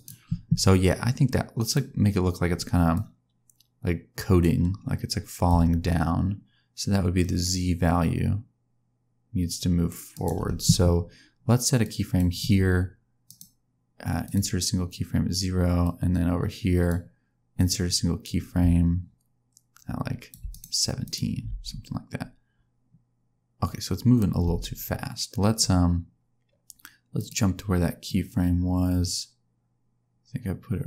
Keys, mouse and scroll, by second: 1.2 click, 2.9 click, 5.4 click, 11.8 click, 13.2 right click, 15.8 click, 17.5 click, 20.4 right click, 21.4 space, 24.4 space, 27.1 click, 28.0 click.